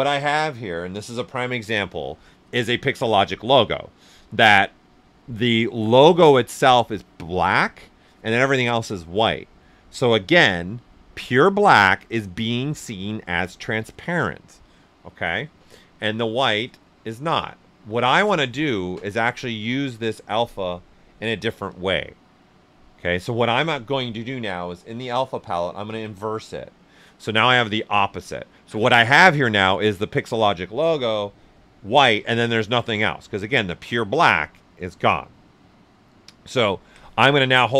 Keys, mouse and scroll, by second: 16.5 click, 24.6 click.